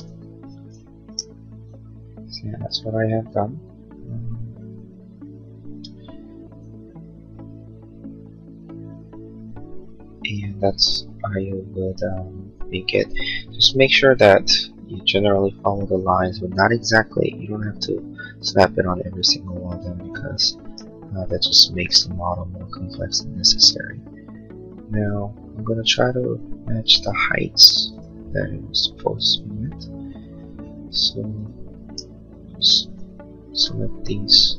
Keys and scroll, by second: 0.1 Escape.